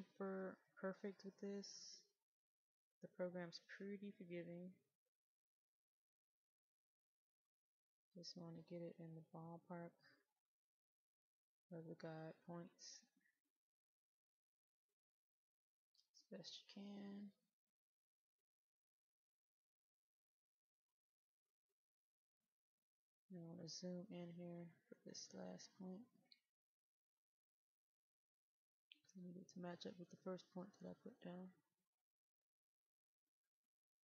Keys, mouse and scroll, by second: 5.2 ctrl+click, 6.0 middle click, 9.2 ctrl+click, 10.6 ctrl+click, 12.1 ctrl+click, 13.7 ctrl+click, 15.0 ctrl+click, 16.2 ctrl+click, 18.9 ctrl+click, 20.9 ctrl+click, 22.2 ctrl+click, 22.9-23.3 scroll up 1, 23.3-24.3 scroll down 1, 24.3 middle click, 31.3 ctrl+click, 32.2-33.1 scroll up 1, 33.1 middle click.